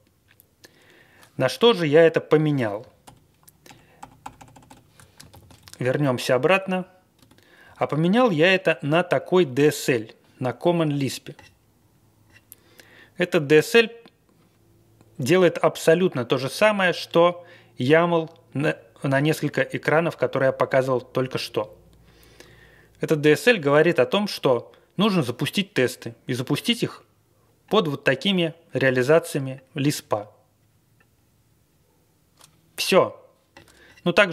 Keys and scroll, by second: 3.0 super+0, 3.6 super+=, 4.0 super+=, 5.3 alt+shift+,, 5.6 Down, 6.2 Tab, 6.6 Down, 7.1 Tab, 7.6 Down, 7.8 Down.